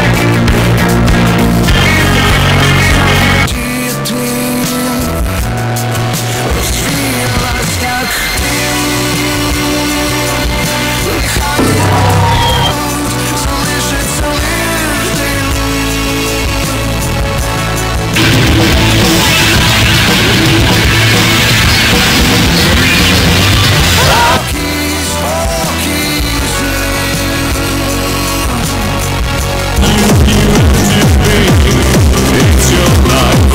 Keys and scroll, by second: 3.5 Page_Down, 12.7 Page_Down, 24.4 Page_Down.